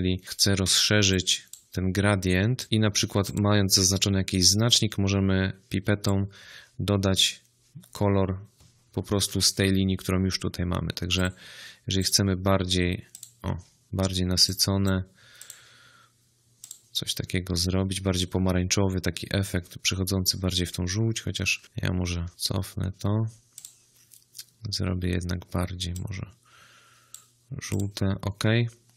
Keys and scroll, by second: 9.0 ctrl+z, 20.9 ctrl+z, 22.3 ctrl+z.